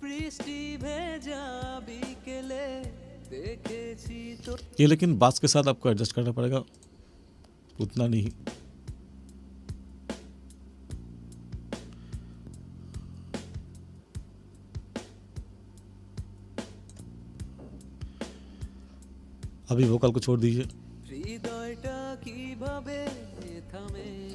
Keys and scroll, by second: 4.5 space, 7.7 space.